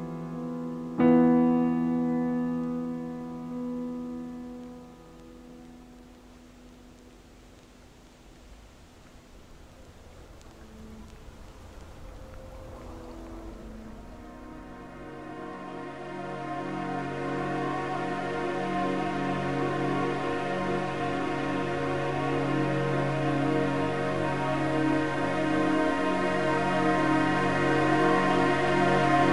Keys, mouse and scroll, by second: 0.0-1.5 typing, 4.5 scroll up 1, 5.0-5.4 middle drag, 5.4-5.9 scroll up 7, 5.9-6.4 shift+middle drag, 6.4-6.8 scroll up 3, 6.9-7.7 middle drag, 7.7 click, 10.5 click, 12.2-13.8 drag, 14.6 scroll down 4, 15.1-17.0 shift+middle drag, 17.0 click, 18.1-19.2 drag, 23.3 click, 25.3-25.7 drag, 25.7 scroll down 1, 26.0-27.4 typing, 27.7-29.3 scroll down 2.